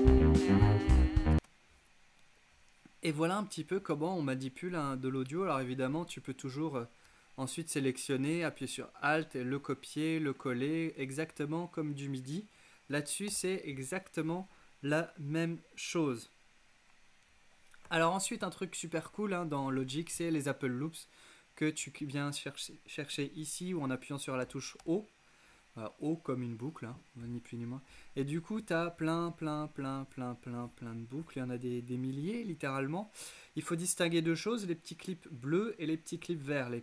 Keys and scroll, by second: 1.4 space, 13.3 BackSpace, 24.4 o.